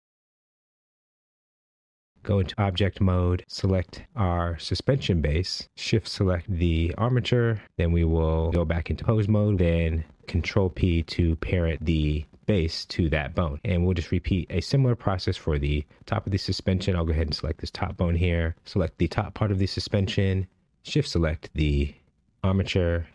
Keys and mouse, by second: 1.1 click, 3.9 ctrl+Tab, 6.3 ctrl+Tab, 10.2 ctrl+p, 13.3 shift+middle drag, 17.4 ctrl+Tab, 19.9 ctrl+Tab.